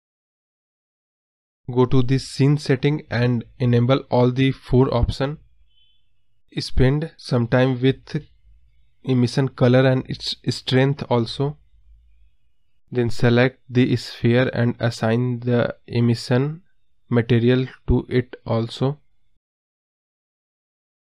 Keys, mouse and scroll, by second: 2.5 KP_0, 4.3-4.9 drag, 5.4-5.8 scroll down 2, 6.7 click, 7.4 click, 7.8 scroll down 1, 9.3-11.1 drag, 14.4 KP_0, 15.2 scroll down 2, 15.4-16.2 scroll up 2, 17.3 click, 18.5-19.6 drag, 19.8 x, 20.9 shift+a.